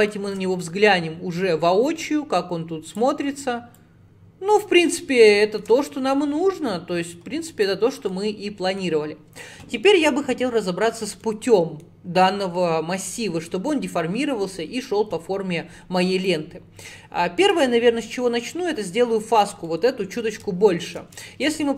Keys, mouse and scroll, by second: 0.1 shift+middle click, 0.5-0.9 scroll down 2, 2.1 click, 3.8 click, 4.9-5.4 scroll up 5, 5.4 shift+middle click, 6.5-6.9 scroll up 4, 6.9 scroll down 1, 7.6 click, 8.2-14.3 middle drag, 16.3-19.5 drag, 19.7-21.7 middle drag.